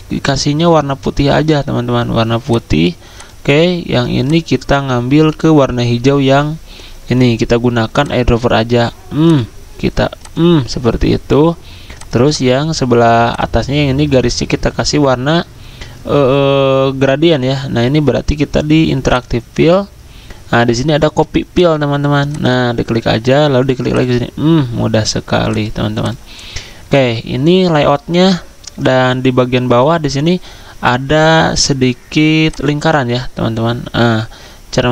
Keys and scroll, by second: 1.4 ctrl+z.